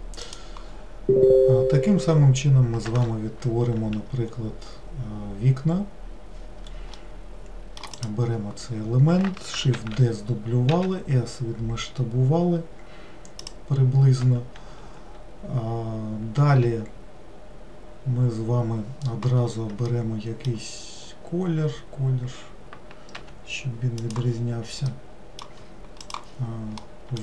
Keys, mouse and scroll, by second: 7.0 middle click, 8.0 click, 9.9 shift+d, 20.0-23.1 middle drag, 23.2 g, 24.9-27.2 middle drag.